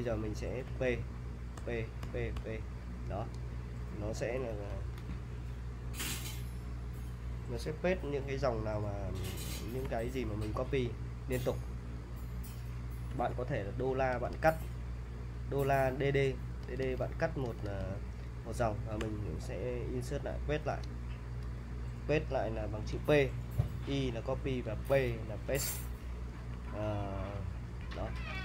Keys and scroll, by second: 0.4-2.4 typing, 9.6-10.6 typing, 12.7-17.7 typing, 19.0 p, 26.3-28.3 typing.